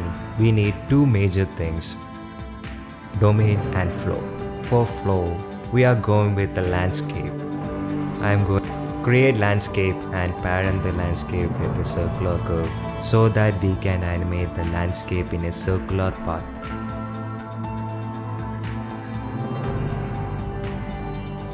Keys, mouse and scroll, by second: 0.0 middle click, 0.4 shift+middle click, 0.5 shift+a, 4.4 KP_7, 5.2 shift+click, 7.0 click, 7.6 shift+click, 7.7 shift+a, 10.4 s, 12.4 click, 13.3-14.4 drag, 14.7 click, 15.4-20.8 typing, 16.7 shift+click, 16.8 click, 17.3 Tab, 19.0 click, 19.6 click, 20.2 click, 20.6 click.